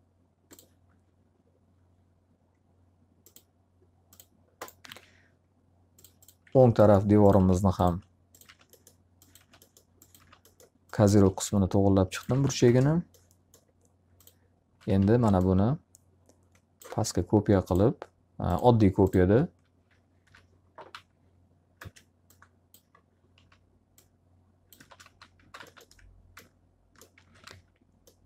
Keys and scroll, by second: 4.4 alt+a, 6.4 alt+r, 12.2 alt+a, 12.6 ctrl+space, 14.8 w, 18.7 s, 20.2 l, 20.8 z, 21.7 space, 23.2 s, 24.7 space, 24.9 x, 25.3 z, 25.5 alt+a, 27.0-27.9 typing.